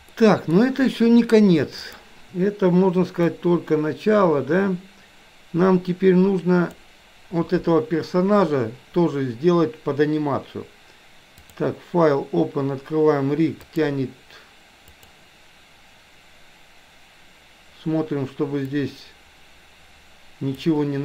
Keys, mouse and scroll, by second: 0.1 middle click, 1.9 click, 3.4-6.9 drag, 11.4-16.5 drag, 18.9-20.9 drag.